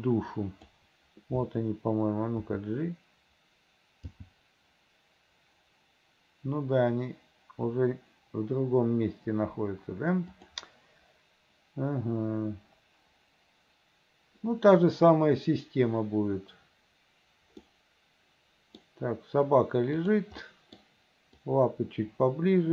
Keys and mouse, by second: 0.0 click, 2.5 f, 4.2 g, 17.9-18.9 drag, 20.1 click, 20.5 click, 21.5-22.7 drag.